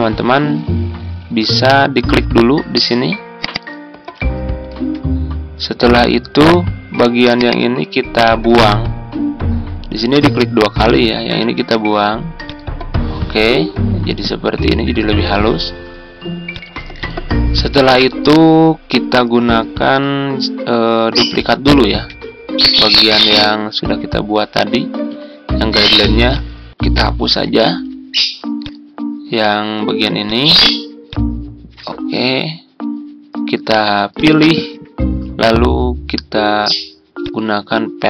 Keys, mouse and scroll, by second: 4.6 Tab, 21.5 ctrl+d, 27.3 Delete.